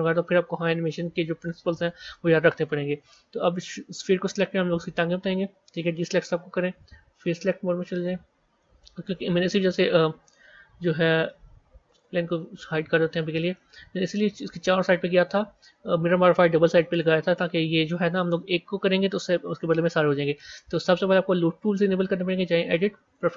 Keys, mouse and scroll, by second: 4.6 b, 7.9 click, 8.5-11.8 middle drag, 11.8 click, 12.7 scroll up 2, 13.5-16.5 middle drag.